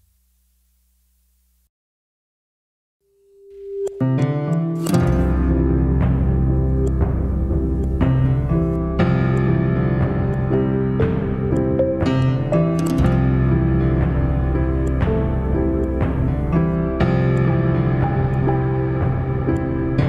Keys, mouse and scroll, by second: 0.3-1.3 scroll down 3, 1.3 click, 2.5-4.8 middle drag, 4.8 g, 8.8-9.6 middle drag, 9.6-10.1 scroll up 3, 10.1-12.0 middle drag, 12.0-12.7 drag, 12.7-14.6 middle drag, 14.6 click, 15.0-18.0 middle drag, 19.3 click.